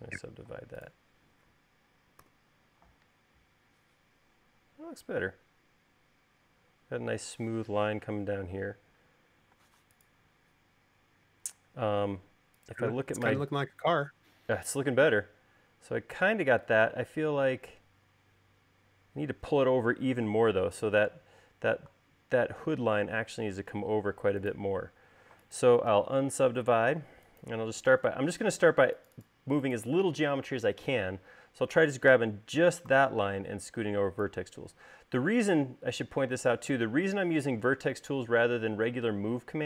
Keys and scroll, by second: 0.3 u, 2.7 u, 10.1 u, 26.6 u, 29.4 u, 33.6 v.